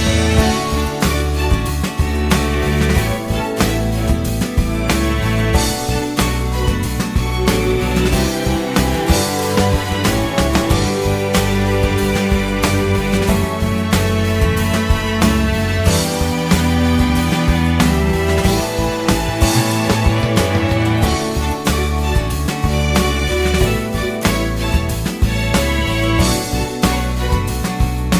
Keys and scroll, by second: 3.9 q, 13.5 6, 13.7 Return, 16.6 ctrl+z, 17.2 ctrl+l, 18.5 ctrl+shift+q, 21.8 a, 25.2 ctrl+z, 26.7 a.